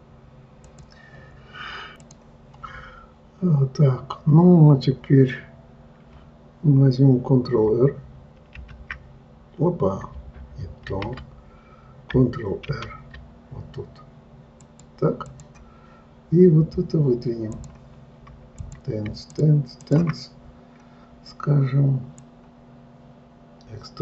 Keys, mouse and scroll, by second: 17.9 click, 19.0 click, 19.7 shift+click, 20.2 shift+click, 22.6-24.0 drag.